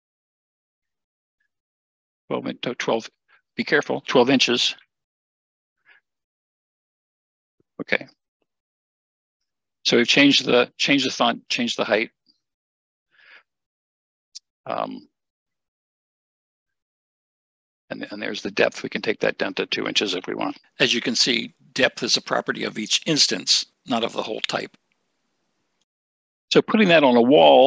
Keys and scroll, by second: 4.7 typing, 5.8 Return, 20.1 2, 21.0 Return.